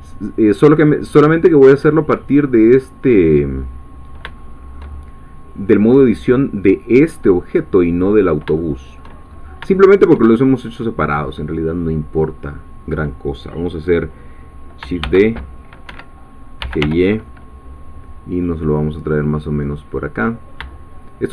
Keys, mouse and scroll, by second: 0.6 click, 0.8 scroll down 2, 4.4 shift+middle click, 8.2-8.6 scroll down 3, 8.6 shift+middle click, 9.2-9.7 shift+scroll up 4, 9.7 shift+middle click, 12.2-14.8 drag, 15.0 shift+d, 15.8 Escape, 16.4-17.3 typing.